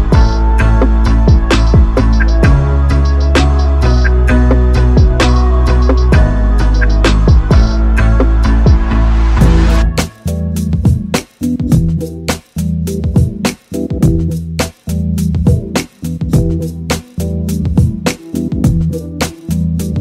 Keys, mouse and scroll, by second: 2.4-3.4 middle drag, 9.9 Delete, 11.1 KP_7, 17.3 KP_7, 19.6 shift+a.